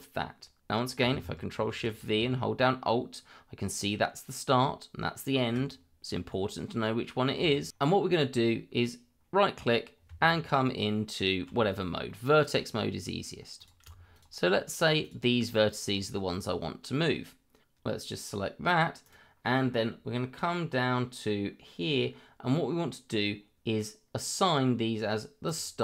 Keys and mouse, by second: 1.5 ctrl+shift+v, 7.5 shift+middle click, 8.1-12.1 right drag, 12.1 middle click, 13.6 click, 14.1 shift+click, 14.7 shift+click, 15.0 shift+click, 15.9-17.0 middle drag, 19.0-25.4 right drag, 25.4 click.